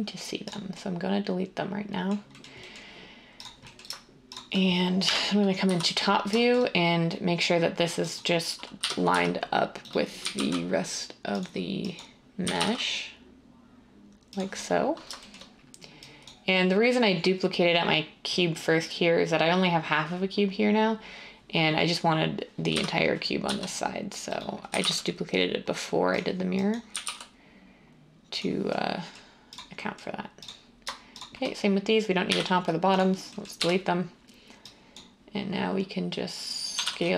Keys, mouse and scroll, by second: 5.0-5.6 typing, 8.5-10.3 typing, 12.4 typing, 22.7-23.4 typing, 24.6 typing, 26.8-27.2 typing, 32.2 x, 33.5 1, 36.7 typing.